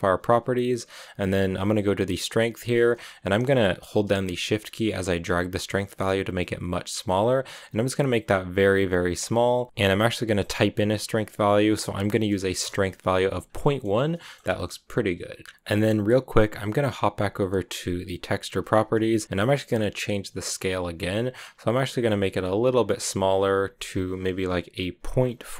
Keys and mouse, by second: 4.8-9.7 shift+drag, 9.7 BackSpace, 13.5 drag, 13.7-14.0 middle drag, 14.0-15.4 drag, 14.0 a, 14.4 a, 15.4-16.8 middle drag, 17.9 click, 20.2 shift+click.